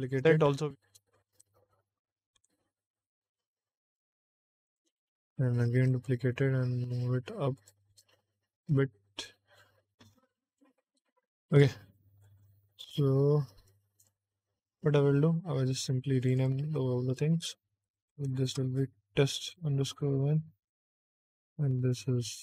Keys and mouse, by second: 0.0 shift+d, 0.4 x, 1.3 g, 2.3 y, 4.6 click, 5.6 shift+d, 5.8 z, 7.5 click, 7.9 g, 8.1 x, 9.0 y, 10.9 middle click, 11.8 middle click, 12.7 click, 13.4 shift+middle click, 13.9 click, 14.2 middle click, 16.1 click, 16.3-22.4 drag.